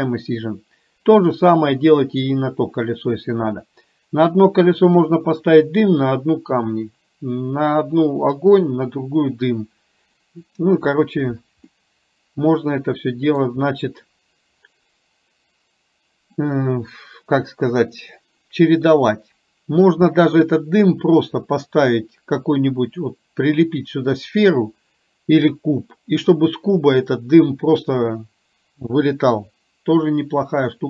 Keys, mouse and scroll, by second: 11.7-13.5 middle drag, 19.2 middle click.